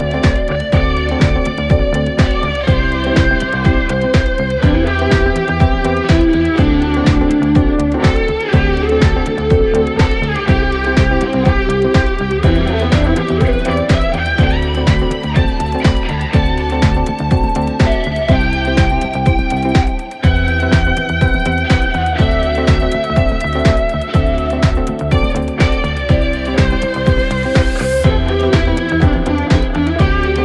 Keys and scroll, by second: 1.2 ], 2.7 ], 5.5 5, 10.6 4, 11.5 3, 13.9 4.